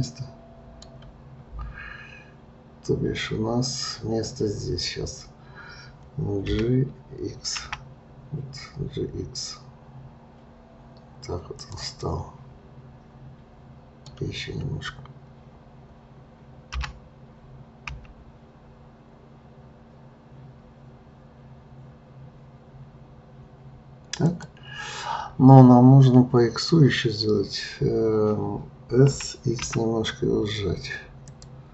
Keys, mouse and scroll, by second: 6.5 g, 12.0-15.1 middle drag, 16.7 g, 29.1 s.